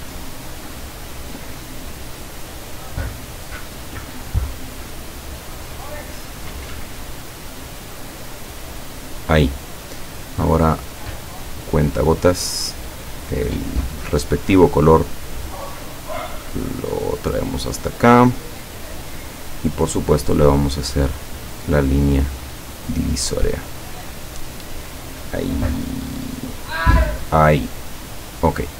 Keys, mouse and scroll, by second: 0.3 click, 3.9 click, 5.7 click, 6.9 click, 8.2 click, 9.2 click, 11.8 click, 12.5 click, 14.7 click, 16.5-18.0 drag, 21.2 click, 22.8 click, 23.8 click, 25.0 click, 26.4 click, 28.4 click.